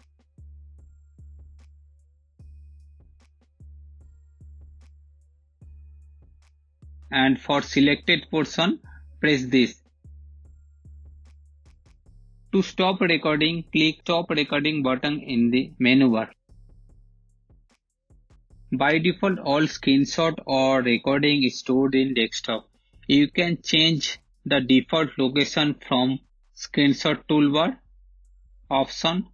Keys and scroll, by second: 3.1-5.1 typing, 11.2-12.5 typing, 17.6 space.